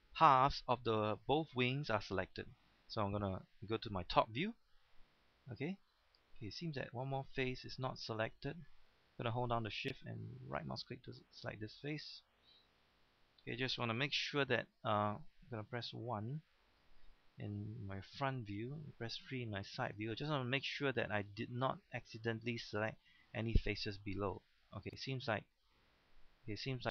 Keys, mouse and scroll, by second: 4.1 KP_7, 5.5 scroll up 1, 6.4 shift+middle click, 6.8-7.2 scroll up 1, 7.2 shift+middle click, 7.6-8.0 scroll up 1, 8.5-9.1 scroll up 1, 9.1 scroll down 1, 10.4 shift+right click, 12.5 scroll down 1, 14.3-14.7 scroll down 1, 14.3 1, 16.0 KP_1, 16.7-17.3 scroll up 1, 17.3-17.6 scroll down 1, 19.1 KP_3, 19.7-20.2 scroll up 1, 20.8 shift+middle click, 21.2-21.5 scroll up 1, 21.8 shift+middle click, 22.5 shift+middle click, 24.0-24.5 scroll down 1, 24.9-26.9 shift+middle drag.